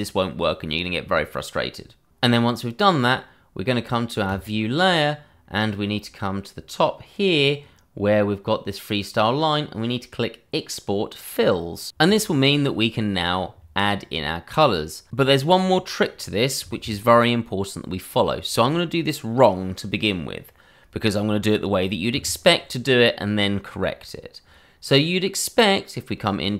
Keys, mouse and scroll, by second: 4.2 click, 5.3-5.9 scroll, 26.2 click.